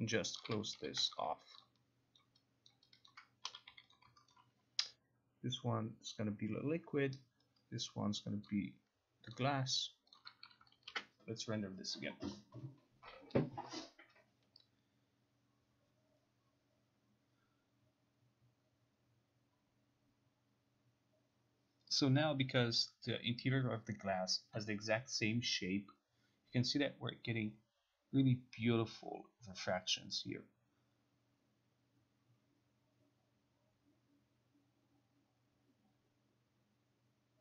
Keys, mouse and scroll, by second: 0.5 click, 0.9 t, 1.7 ctrl+click, 2.3 ctrl+click, 2.8 ctrl+click, 3.2 ctrl+click, 3.3-4.3 typing, 4.0 click, 4.4 alt+right click, 6.3 click, 9.4 click, 10.3 click, 11.0 ctrl+r.